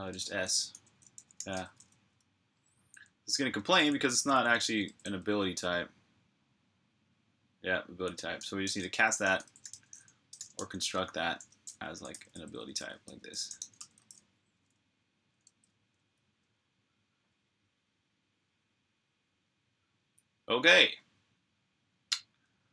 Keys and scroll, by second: 0.9 Escape, 0.9-2.6 typing, 7.9-16.7 typing.